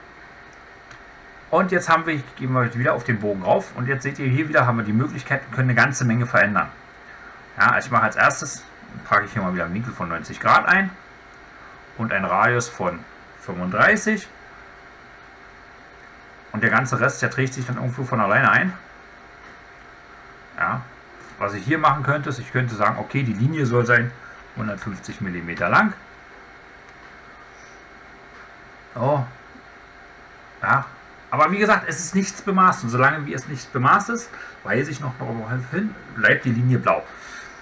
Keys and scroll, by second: 0.8 Escape.